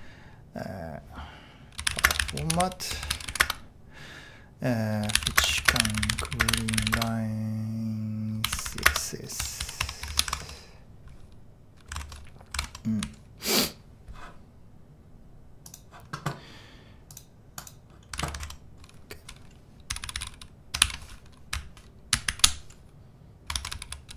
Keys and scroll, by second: 1.6-10.1 typing, 9.8 Return, 12.6 super+Tab, 13.0-13.5 typing, 18.4 super+Tab, 19.7-21.3 typing, 22.3 alt+super+v, 23.7-24.1 typing.